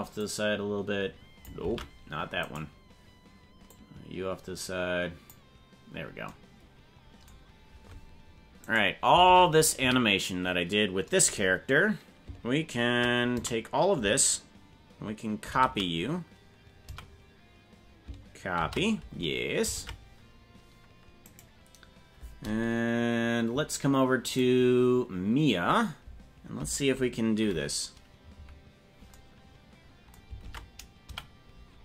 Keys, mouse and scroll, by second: 0.2-1.5 drag, 1.7 ctrl+z, 2.5 right click, 3.7-5.3 drag, 8.7 right click, 9.3 ctrl+Tab, 9.8 a, 13.3 a, 15.5 ctrl+c, 17.0 a, 19.7 ctrl+Tab, 21.3 right click, 24.3 right click, 28.3 KP_Decimal, 30.5 ctrl+Tab, 31.1 a.